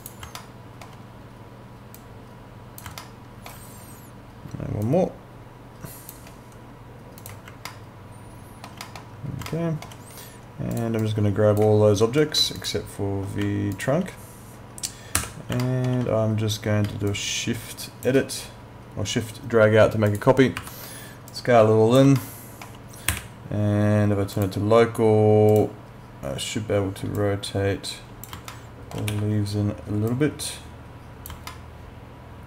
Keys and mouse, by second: 0.0 click, 0.4 alt+middle click, 2.0 click, 3.0 alt+middle click, 4.8 shift+click, 7.7 alt+middle click, 9.5 alt+middle click, 10.7 click, 12.6 ctrl+click, 13.8 alt+click, 15.2 w, 15.6 alt+middle click, 17.1 shift+click, 20.1 click, 20.6 r, 21.3 click, 22.2 alt+middle click, 23.1 e, 24.4 click, 28.5 alt+middle click, 29.8 w, 30.1 click, 31.5 alt+middle click.